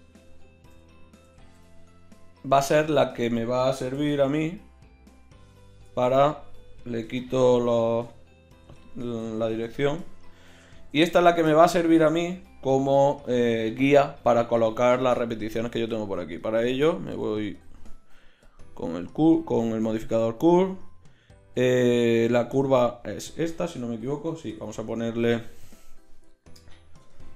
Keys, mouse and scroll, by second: 0.7 g, 3.9 v, 7.1 n, 8.6 n, 10.5-15.1 drag, 11.9 Tab, 16.4-18.5 drag, 23.5-27.3 right drag, 24.5 n.